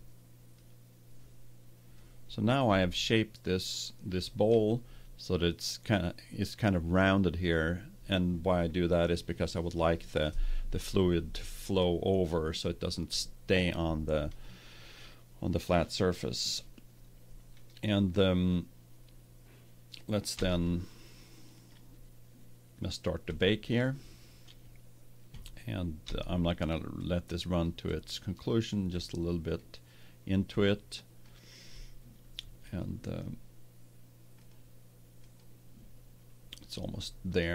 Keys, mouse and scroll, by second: 0.5-2.2 drag, 2.3-4.6 middle drag, 5.1-7.1 middle drag, 19.0-20.3 middle drag, 20.3 Tab, 21.5-23.2 right drag, 23.6-25.2 drag, 26.1-27.3 middle drag, 28.7-32.4 middle drag, 32.6-34.2 drag, 36.1 click.